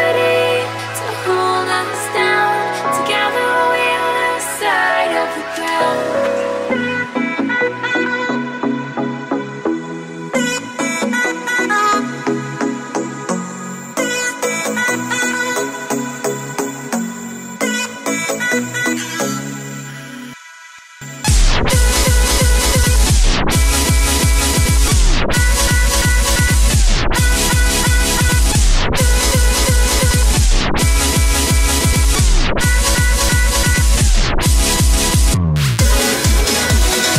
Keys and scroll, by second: 35.6 ctrl+t.